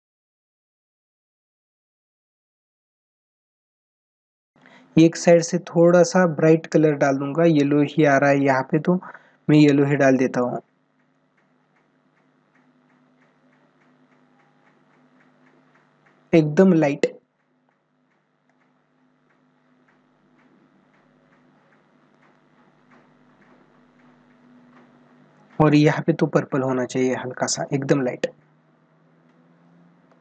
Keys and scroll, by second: 0.0 space, 0.2 ctrl+=, 4.4 ctrl+=, 29.8 ctrl+alt+z.